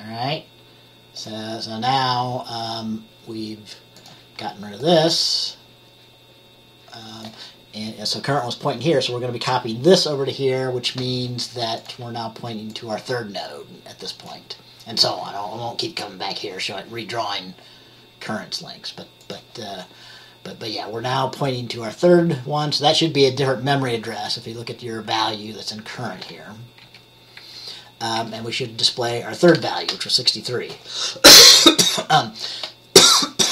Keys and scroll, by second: 26.9 F10, 27.5 F10, 28.3 F10.